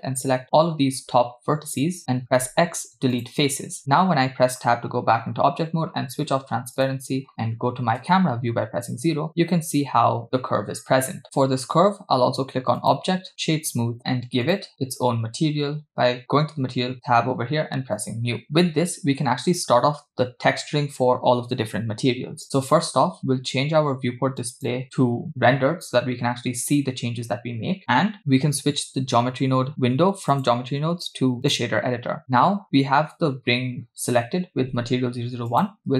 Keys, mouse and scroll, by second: 2.4 x, 3.9 Tab, 6.8 click, 7.9 KP_0, 12.8-14.0 drag, 14.5 click, 18.0 click, 24.7 click, 30.4-31.8 drag, 35.5-35.9 drag.